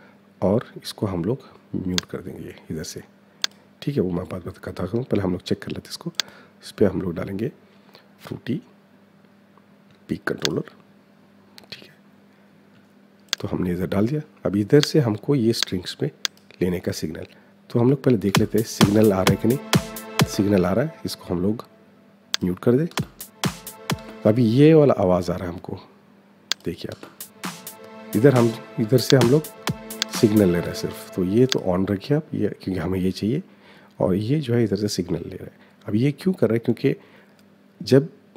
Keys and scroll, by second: 17.9 space, 19.9 space, 22.6 space, 26.5 space, 28.0 -, 30.3 -.